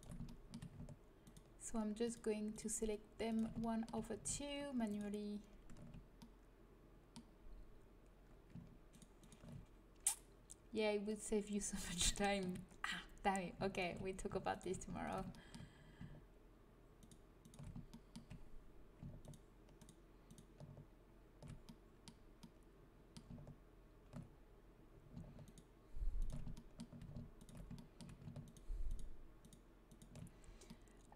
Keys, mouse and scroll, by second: 0.2 click, 8.8-10.9 right drag, 12.0 middle click, 12.4 middle click, 13.6-18.1 middle drag, 21.5 click, 21.6 right click, 21.9-23.4 middle drag, 25.3-29.5 middle drag, 30.6 middle click.